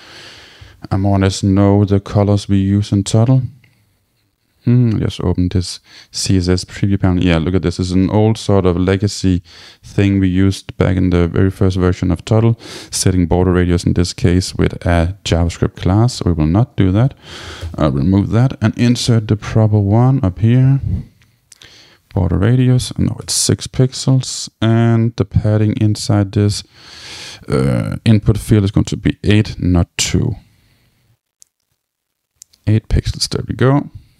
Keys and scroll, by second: 7.8 super+Left, 9.3 shift+super+Right, 17.5 shift+Return, 23.1 Return.